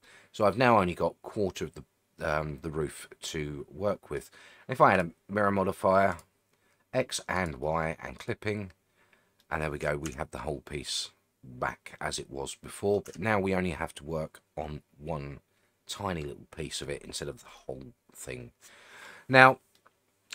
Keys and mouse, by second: 0.0-4.2 middle drag, 7.3 click, 8.2 click, 9.4 middle click, 10.1 Tab, 10.4-13.0 middle drag, 17.6-19.1 middle drag, 19.7-20.3 middle drag.